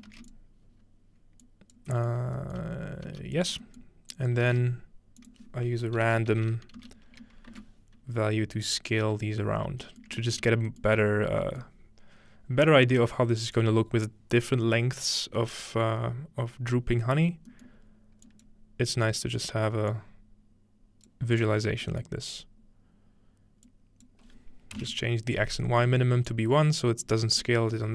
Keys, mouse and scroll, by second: 0.1 typing, 3.1 g, 3.4 click, 4.1 click, 4.5 typing, 6.3-7.5 typing, 8.7 click, 9.9-12.3 shift+middle drag, 11.1-13.1 scroll up 1, 17.7-19.1 scroll up 2, 18.3 click, 19.1-23.6 drag, 19.1-19.9 scroll up 1, 21.9-23.7 middle drag, 22.4-23.6 scroll up 1, 23.6-24.7 scroll up 1, 23.7-24.8 drag, 25.9-27.4 middle drag, 26.3 click.